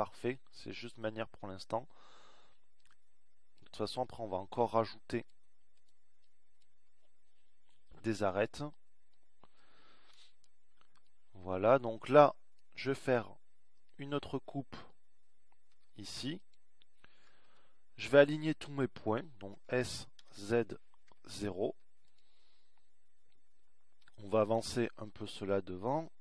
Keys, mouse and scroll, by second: 4.6 middle click, 13.5 z, 19.1 ctrl+r, 23.0 s, 25.6 click.